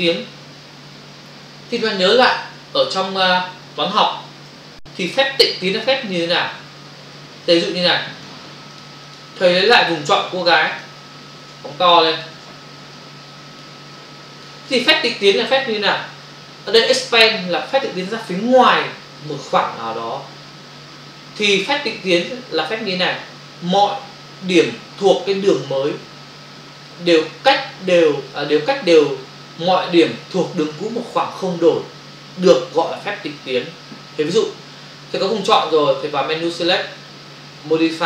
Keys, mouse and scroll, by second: 2.8 click, 4.5 Delete, 8.2 click, 9.1 click, 9.2 double click, 9.6 click, 10.8 ctrl+click, 11.8 ctrl+click, 12.8 space, 13.0 click, 13.2 space, 14.1 ctrl+click, 36.7 click.